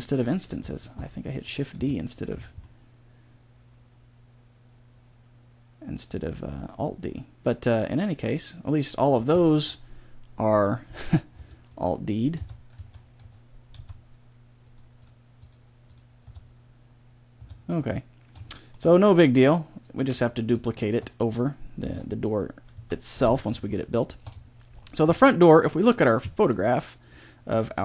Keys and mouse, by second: 1.7 Tab, 9.1 a, 11.3 Tab, 12.3 Tab, 12.7 a, 13.7 Tab, 16.2 Tab, 17.3 Tab, 21.8 KP_7, 22.7 z.